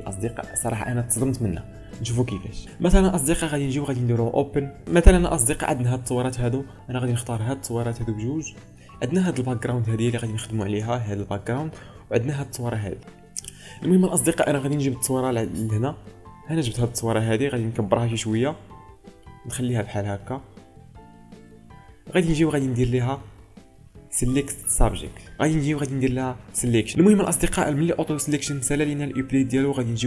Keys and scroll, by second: 9.2 ctrl+space, 10.8 ctrl+space.